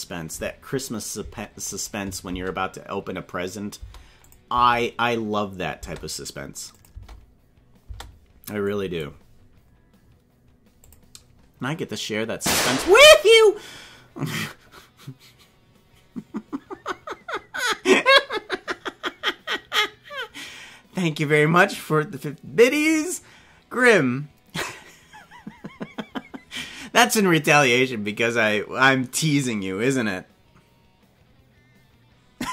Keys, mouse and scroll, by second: 1.6 click, 2.2 space, 3.8 space, 4.2 click, 4.5 space, 5.8 space, 6.7 click, 6.9 space, 7.8 space, 8.7 click, 10.8 click.